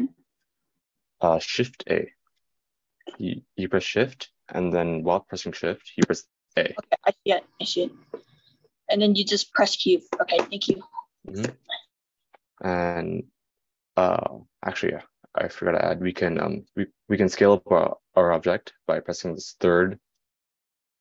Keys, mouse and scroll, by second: 9.9 shift+a, 18.1-21.0 drag.